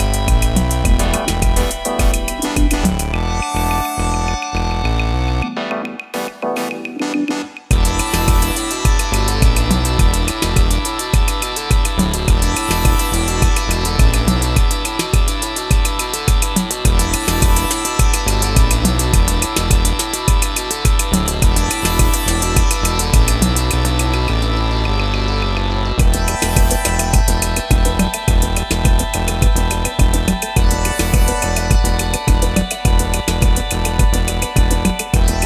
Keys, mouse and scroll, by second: 14.0 ctrl+t, 15.0 alt+shift+click, 22.1 Return.